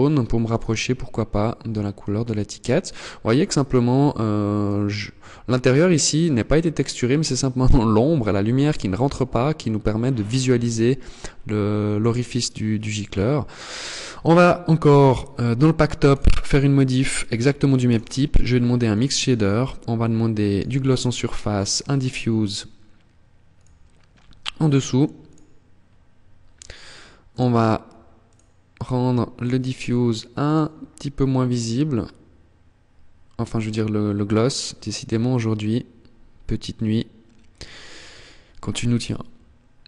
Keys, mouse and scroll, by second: 13.8 click, 14.7 click, 17.9 click, 22.8 click, 26.4 click, 27.1 click, 28.2 click, 29.5 click.